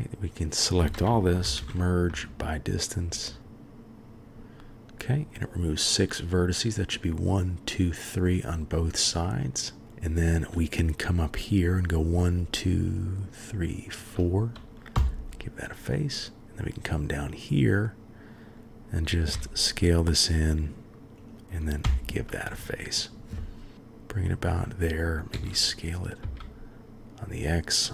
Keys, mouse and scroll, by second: 1.4 m, 3.1 Up, 3.4 click, 8.2-8.8 middle drag, 9.2-9.8 middle drag, 12.4 shift+click, 13.5-13.9 shift+drag, 14.9 f, 15.9-16.6 drag, 18.0-18.7 drag, 19.3 s, 21.8 f, 22.5 click, 23.7 g, 25.3 s.